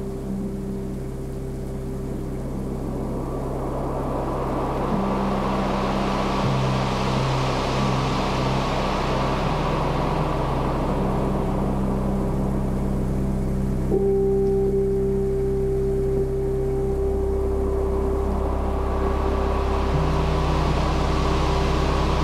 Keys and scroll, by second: 1.2 super+z, 3.7-7.9 typing, 10.3-11.7 typing, 12.7-16.1 typing, 17.2 space, 19.4-22.2 typing.